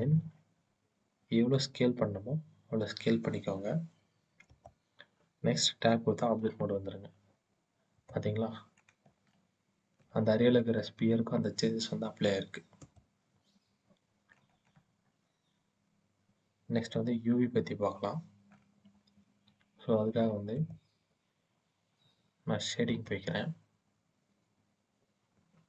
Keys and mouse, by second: 4.3-6.2 drag, 6.2 Tab, 9.1 shift+middle click, 9.2 shift+click, 9.3-9.9 shift+middle drag.